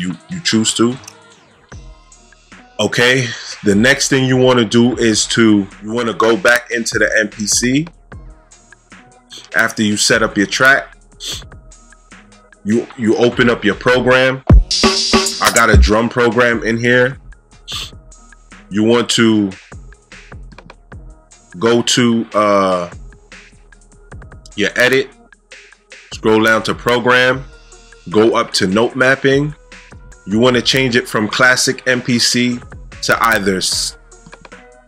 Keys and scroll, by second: 0.8 shift+t.